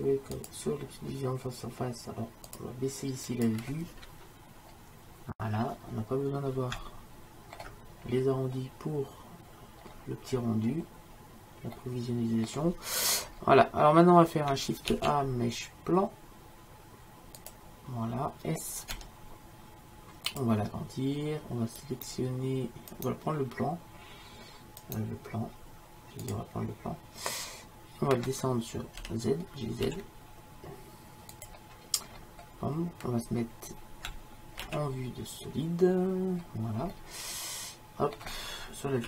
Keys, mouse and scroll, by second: 0.4-2.2 drag, 2.6-5.4 drag, 5.5-7.3 middle drag, 8.7-10.6 middle drag, 15.1 shift+a, 19.0 s, 22.0-24.0 drag, 26.2-28.9 right drag, 29.0 g, 34.8 shift+z, 36.9 middle click.